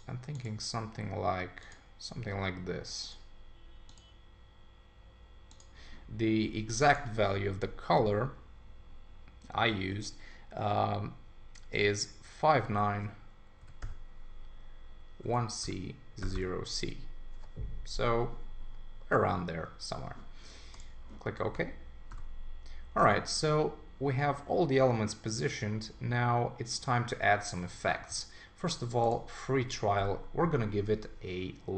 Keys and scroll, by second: 21.5 super+s, 29.5 ⟲.